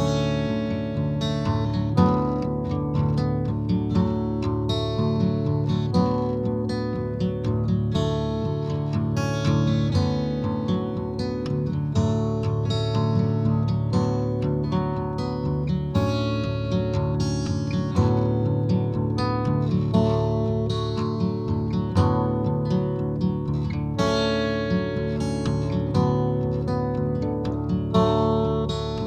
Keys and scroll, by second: 0.0 ctrl+shift+v, 2.3 shift+;, 19.4 shift+;.